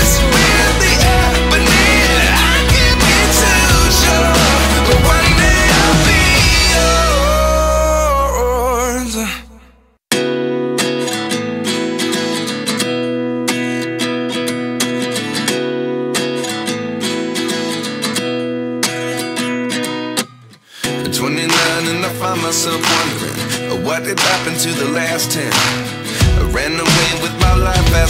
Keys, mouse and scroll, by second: 10.7 double click, 20.3 double click.